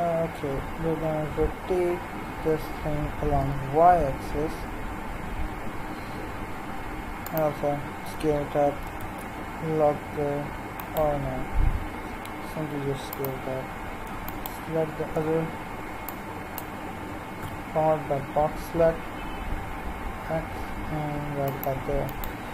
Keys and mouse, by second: 1.4 r, 8.0 s, 11.6 s, 14.3-16.6 right drag, 17.4 g, 22.1-22.5 right drag.